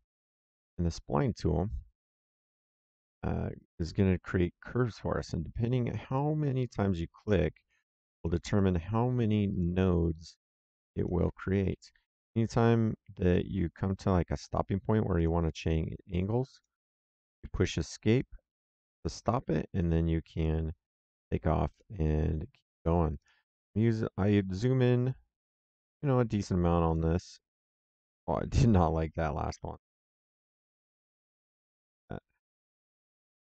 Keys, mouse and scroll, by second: 2.2 click, 3.5 click, 5.1 click, 7.7 click, 10.9 click, 11.6 Escape, 14.2 click, 16.4 click, 17.3 Escape, 19.1 click, 20.3 click, 22.0 middle click, 23.1 click, 26.8 click, 29.4 Escape, 30.6 ctrl+z, 31.8 s, 32.7 click.